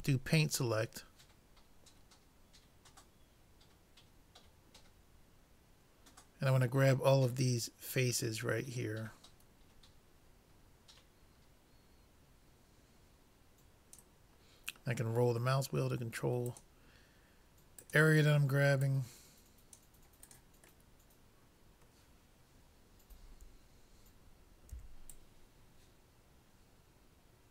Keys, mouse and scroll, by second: 0.1 c, 21.0-23.1 middle drag, 24.8 c.